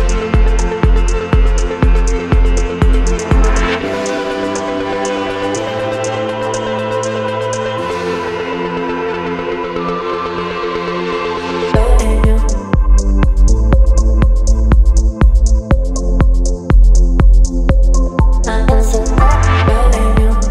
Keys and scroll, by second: 1.8 Down, 1.9 Down, 2.2 Down, 2.3 Down, 3.0 Down, 3.1 Down, 3.2 Down, 5.8 space, 8.0 space, 14.2 ctrl+shift+i, 17.7 space, 18.4 e.